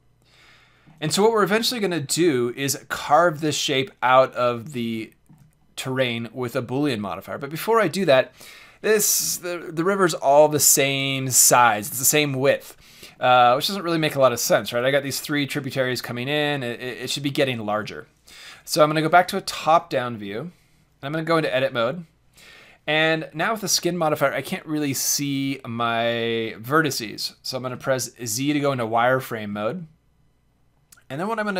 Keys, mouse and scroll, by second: 1.2-10.3 middle drag, 13.1-16.1 middle drag, 17.3-18.9 middle drag, 18.7 KP_7, 20.2 middle click, 21.1 Tab, 27.7 z.